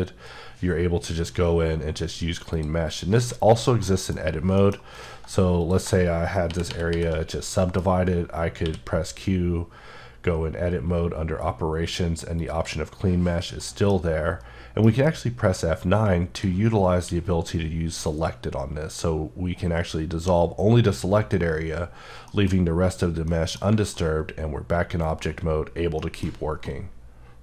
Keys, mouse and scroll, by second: 2.5 click, 3.1 3, 3.5 click, 3.8 middle click, 4.2-4.6 scroll down 1, 4.6 middle click, 5.0 right click, 5.6 click, 6.5 shift+r, 6.9 shift+r, 7.2-7.5 scroll up 1, 7.5 middle click, 8.6 q, 12.4 click, 13.3 scroll down 1, 13.6 middle click, 14.8 F9, 22.0 Num_Lock, 22.0 Caps_Lock, 22.0 scroll down 3, 22.3 middle click, 23.9 middle click, 26.0 middle click.